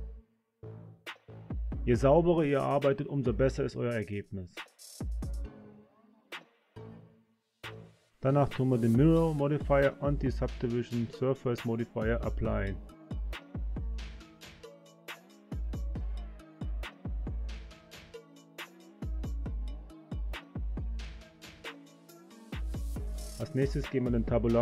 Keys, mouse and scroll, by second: 1.2 s, 3.6 click, 3.8 click, 4.0 click, 4.2 e, 4.4 click, 4.7 s, 5.0 click, 5.3 e, 5.5 click, 6.4 click, 6.5 s, 6.9 click, 7.1 click, 7.2 s, 7.5 click, 7.7 click, 8.2-10.2 middle drag, 13.4-14.3 drag, 15.4 click, 16.3 click, 17.4 click, 17.9 right click, 21.6-22.6 drag, 23.2 Tab, 23.5 click.